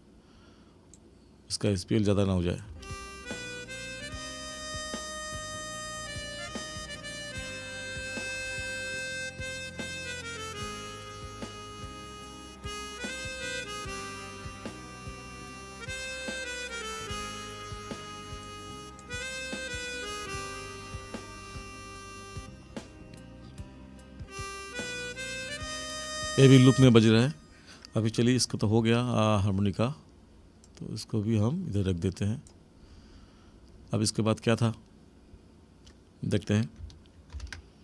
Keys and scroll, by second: 2.7 space, 26.8 space, 37.3 ctrl+=.